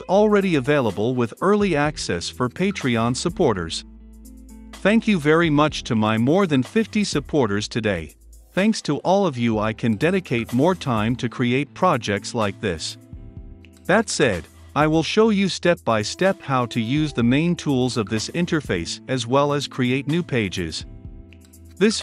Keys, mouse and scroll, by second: 7.7-9.0 typing, 9.2 click, 9.5-13.1 middle drag, 13.1-16.7 drag, 16.9 ctrl+F5, 18.5-22.0 drag, 21.9-22.0 typing.